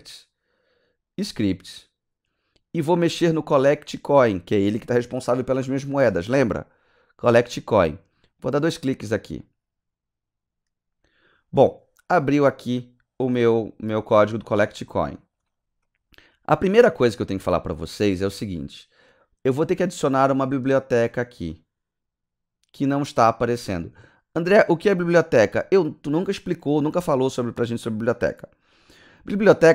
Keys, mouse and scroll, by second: 1.1 click, 8.3 click, 8.5 click.